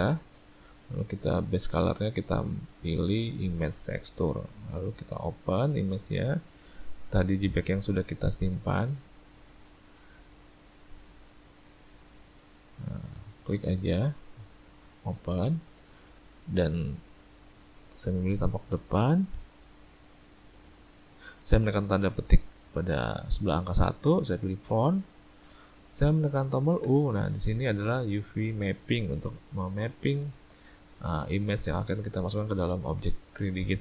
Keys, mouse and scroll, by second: 2.2 click, 5.3 click, 26.9 u.